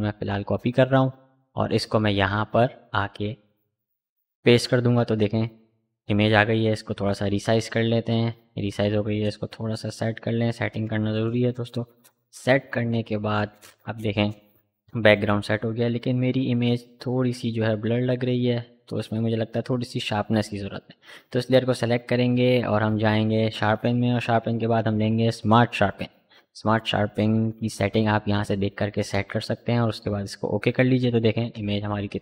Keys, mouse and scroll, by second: 0.2 click, 3.9 ctrl+v, 5.2 ctrl+t, 6.4-8.8 drag, 8.8-13.9 shift+drag, 14.3 click, 16.2 v, 19.5 click, 25.0 click, 29.7 click.